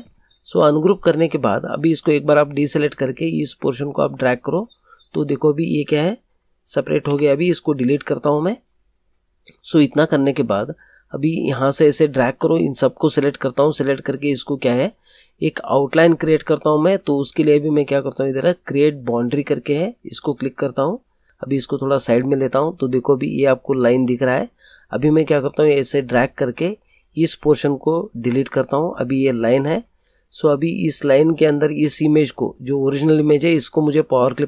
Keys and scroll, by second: 7.0 Delete, 28.0 Delete.